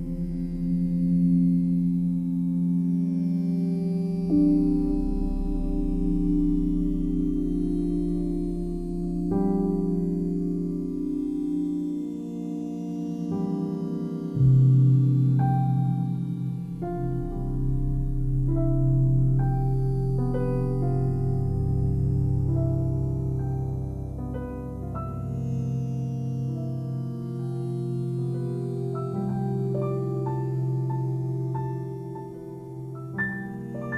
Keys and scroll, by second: 2.8 space, 6.1 ctrl+t, 18.9 space, 19.6 ctrl+z, 20.0 space, 25.6 ctrl+t.